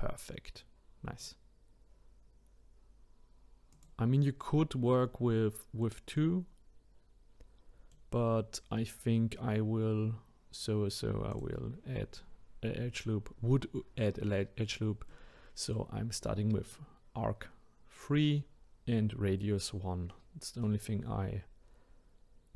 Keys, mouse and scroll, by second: 3.7 click, 4.5-11.3 middle drag, 11.3-14.3 drag, 15.1-22.5 middle drag.